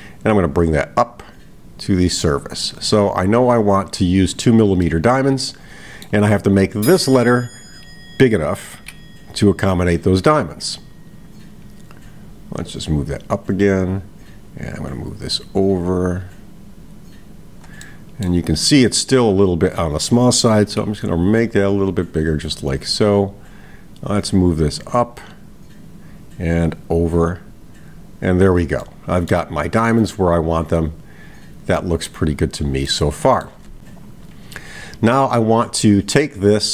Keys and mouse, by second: 1.4-4.5 drag, 4.8-6.1 middle drag, 6.6 click, 12.9-14.0 drag, 15.0-17.6 drag, 17.8-18.3 middle drag, 19.8 click, 23.7 click, 25.1 click, 27.1-28.5 drag, 28.8-29.4 middle drag, 30.1-32.2 middle drag, 32.9-33.7 middle drag.